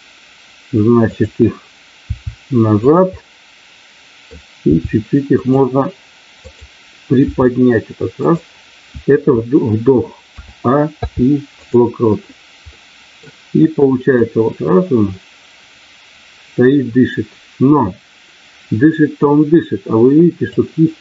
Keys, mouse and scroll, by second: 1.0 click, 2.0 r, 3.1-4.3 middle drag, 4.6 r, 5.4 click, 6.4 click, 8.1 click, 10.9 i, 12.7 middle click, 14.2-20.6 drag.